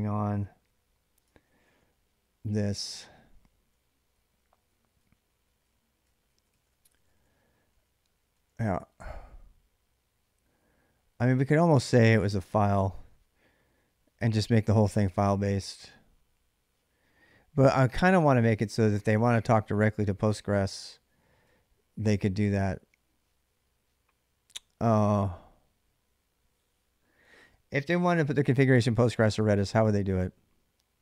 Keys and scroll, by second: 1.1 k, 1.3 k, 2.2 j, 3.3-8.2 typing, 18.0-21.0 typing.